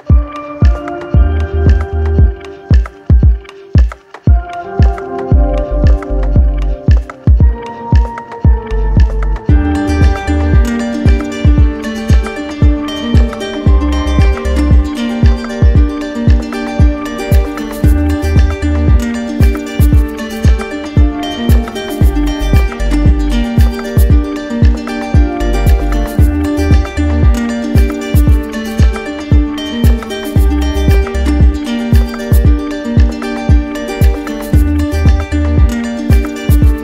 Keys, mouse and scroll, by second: 1.6 shift+click, 4.3 click, 4.7 alt+click, 5.5 click, 6.1 click, 7.8 z, 8.6 click, 9.4 right click, 10.4 right click, 10.5-11.6 drag, 15.0-16.1 drag, 17.9-19.0 drag, 23.2 click, 24.6 click, 25.8 alt+click, 26.0 alt+click, 26.6 click, 27.4 alt+click, 29.4 alt+click, 31.3 click, 33.0 alt+click, 33.8 click, 35.7 alt+click.